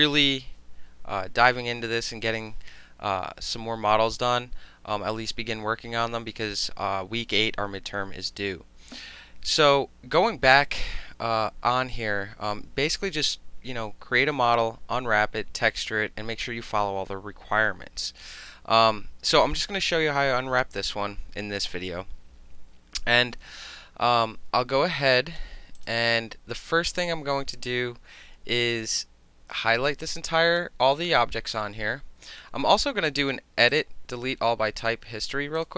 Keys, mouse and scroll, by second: 25.8 click, 29.0-30.6 drag, 33.7 click, 34.8 click, 35.6 click.